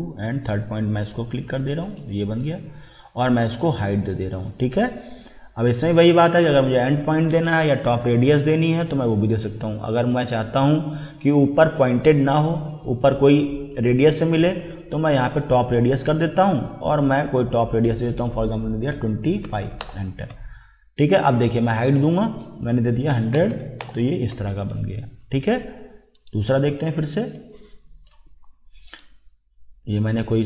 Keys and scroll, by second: 18.9 2, 19.5 5, 19.8 Return, 22.9-23.9 typing.